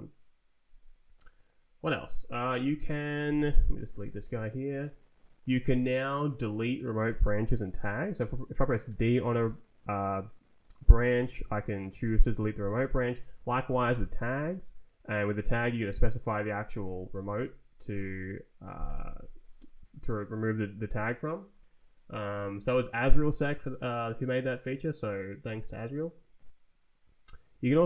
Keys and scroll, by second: 2.4 ctrl+t, 3.6 d, 4.0 Return, 4.5 Right, 8.7 d, 11.3 Down, 12.4 Escape, 13.1 [, 13.6 d, 14.1 Down, 14.5 Return, 16.6 Escape, 17.3 [.